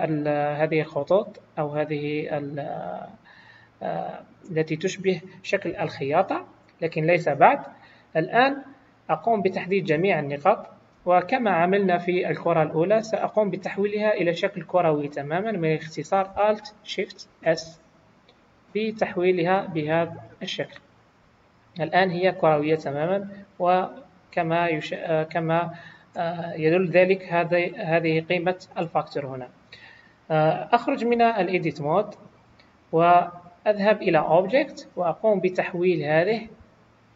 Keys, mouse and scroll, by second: 0.1 middle click, 5.7 KP_1, 6.9-7.9 scroll down 1, 9.7 click, 10.9 a, 16.9 alt+shift+s, 23.3 click, 31.1 Tab, 34.3 click.